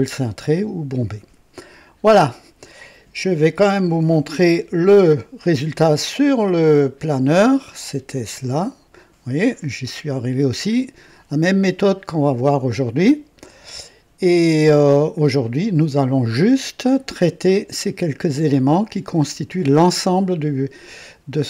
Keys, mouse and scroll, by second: 4.6 F11, 8.4 click, 13.4 click, 15.4 click.